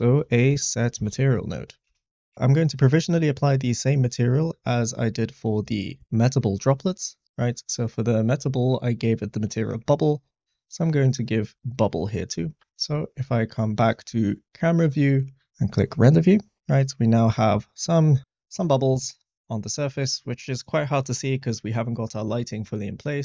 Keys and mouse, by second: 3.5 click, 10.3 click, 11.7-12.7 drag, 13.9 click, 17.5 click, 22.8 click.